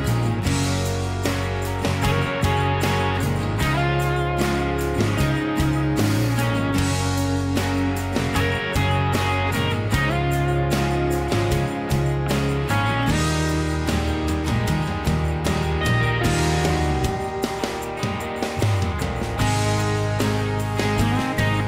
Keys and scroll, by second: 0.0 m, 3.1-5.2 typing, 5.2 Return, 14.6 ctrl+z, 14.8 ctrl+z, 15.0 ctrl+z, 18.3-19.6 typing, 21.3 Escape.